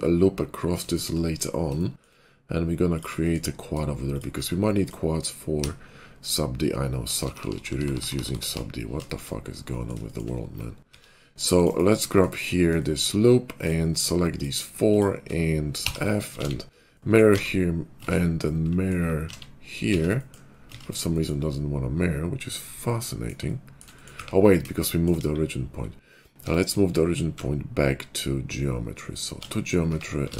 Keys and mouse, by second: 0.1-2.8 middle drag, 2.8 click, 2.9-6.3 shift+middle drag, 5.4-8.4 typing, 7.8-13.5 middle drag, 10.8 ctrl+r, 13.5 click, 13.6 shift+middle click, 13.8 shift+click, 14.0-15.2 shift+middle drag, 15.8 f, 16.3 alt+x, 17.3 alt+x, 18.0 ctrl+z, 19.2 alt+x, 19.7 z, 20.7 ctrl+z, 20.7-24.1 middle drag, 25.1 KP_5, 26.3 Tab, 27.3 shift+s, 29.8 Tab, 30.2 alt+x.